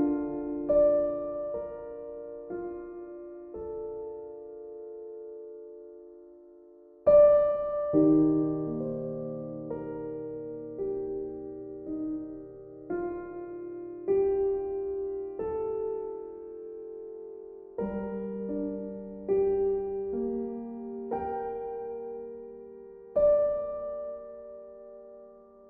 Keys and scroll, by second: 5.9 e, 15.0 e.